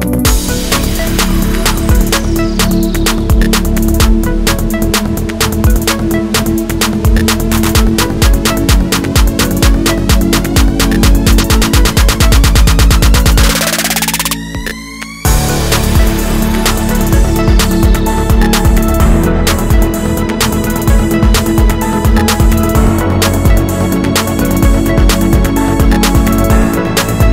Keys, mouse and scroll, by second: 2.9-6.1 middle drag, 3.9 scroll up 1, 5.0 scroll up 1, 5.6 z, 6.1 click, 6.2 middle click, 6.5 shift+click, 6.7 e, 7.8 click, 8.0 middle click, 8.2 s, 8.8 click, 9.0-10.5 middle drag, 9.3 o, 10.5 click, 11.9-13.2 middle drag, 12.1 e, 13.2 click, 13.2-16.8 middle drag, 13.7 shift+d, 13.8 Return, 16.8 click, 17.0 s, 17.5 click, 17.6 middle click, 17.7 e, 18.1 click, 18.5 l, 19.5 click, 19.6 middle click, 19.8 Tab, 20.0 click, 23.7 middle click, 24.0 shift+d, 24.7 click, 24.9 shift+d, 25.8 click, 25.9 middle click, 26.2 Tab, 26.4 click, 26.5 scroll down 2, 26.7-27.3 middle drag.